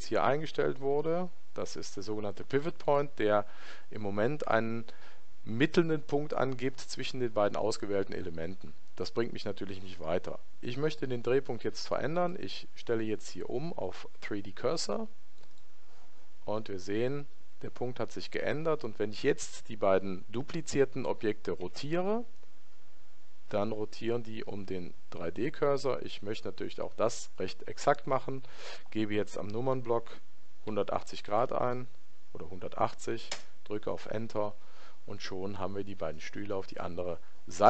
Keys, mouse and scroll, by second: 2.9 click, 12.2 click, 21.7 r.